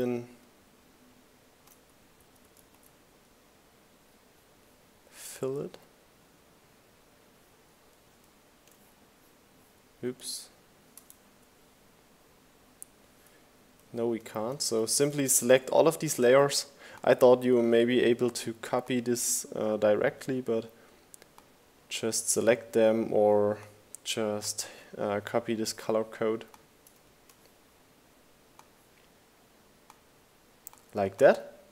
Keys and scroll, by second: 0.5 super+v, 9.3 super+z.